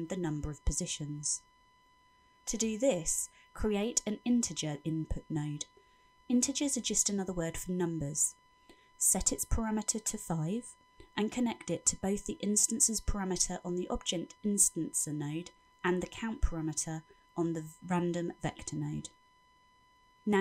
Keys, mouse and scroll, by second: 0.9-1.5 scroll up 7, 1.9 middle click, 5.1 shift+a, 10.5 click, 12.9 click, 15.6 click.